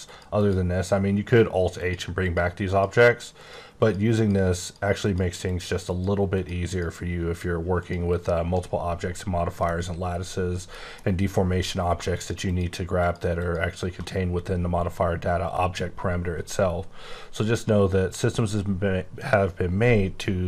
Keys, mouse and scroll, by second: 0.4 click, 1.8 click, 2.2 click, 3.4 click, 3.8 click, 4.6 click, 5.0 click, 5.9 click, 7.8 click, 8.1 click, 9.6 middle click, 10.5 middle click, 12.1 shift+click, 12.5 shift+click, 13.0 shift+click, 13.4 shift+click.